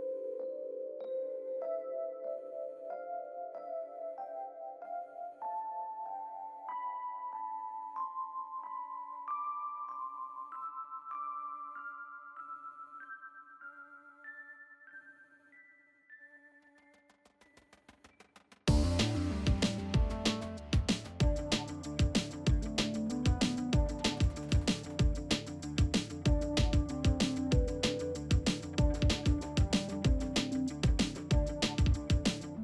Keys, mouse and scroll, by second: 1.6 click, 5.7 click, 7.1-7.9 typing, 9.5 Return, 11.1-11.7 drag, 14.6 0, 15.1 Return, 15.7 space.